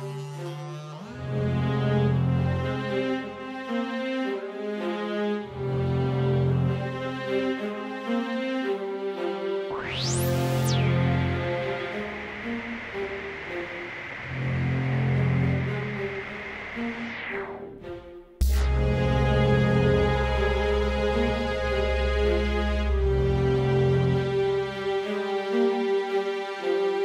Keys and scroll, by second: 3.6 Right, 4.0 Left, 10.4 Down, 10.5 Right, 10.6 Right, 10.7 Right, 10.9 Down, 11.1 Left, 11.6 Up, 11.8 Down, 11.9 Down, 12.1 Left, 17.0 Right, 24.8 Down, 24.8 Up, 24.8 Left, 24.8 Right.